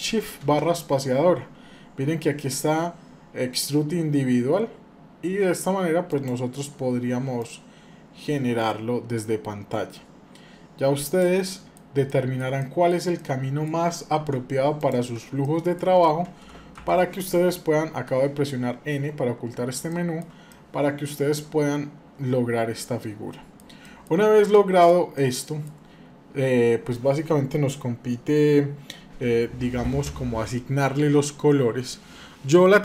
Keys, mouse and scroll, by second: 0.2 shift+space, 7.3-11.3 drag, 11.3 middle click, 11.6 scroll down 1, 11.8 shift+middle click, 12.3 middle click, 12.9 middle click, 14.0 Tab, 14.6 click, 15.2 shift+middle click, 16.5 n, 19.7-20.0 shift+middle drag, 20.3-23.9 middle drag, 24.3 middle click, 24.9 middle click, 25.9 scroll down 2, 26.7-28.0 scroll down 2.